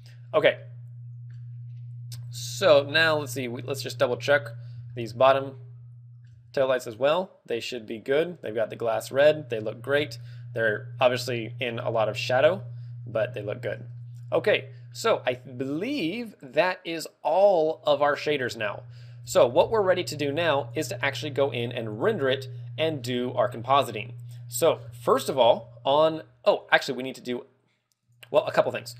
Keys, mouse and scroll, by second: 0.5 middle click, 1.7 scroll up 3, 2.2 shift+middle click, 2.9 middle click, 2.9 scroll up 2, 4.3 scroll up 2, 4.5 scroll down 1, 4.9 shift+middle click, 7.5 right click, 10.1 ctrl+middle click, 12.5 ctrl+middle click, 13.9 middle click, 15.9 middle click, 17.0 middle click, 17.4 middle click, 18.1 middle click, 18.2 middle click, 18.5 scroll up 1, 19.1 KP_0, 19.2 middle click, 19.2 scroll up 1, 19.2 KP_0, 20.1 ctrl+w, 26.5 click, 27.9 click, 28.5 scroll down 1.